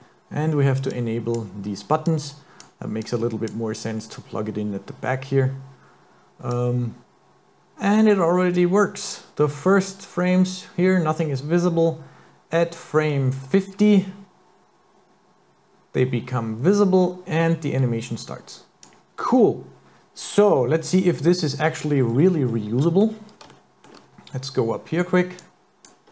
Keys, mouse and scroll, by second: 0.9 click, 2.0 click, 3.0 click, 6.6 click, 20.5-21.0 scroll down 4, 21.3 middle click, 22.0 scroll down 1, 22.1-22.8 scroll up 5, 22.8 middle click, 23.6 shift+middle click, 23.6 shift+scroll up 1, 25.4 click.